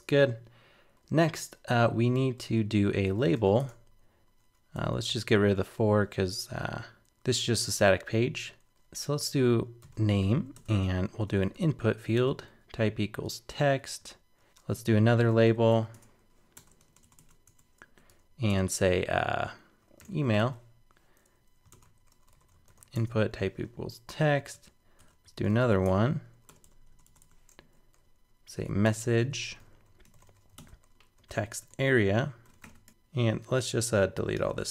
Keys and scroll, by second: 10.6 super+Return, 13.8 super+Right, 14.5 super+Return, 24.2 super+Right, 30.6 super+Return.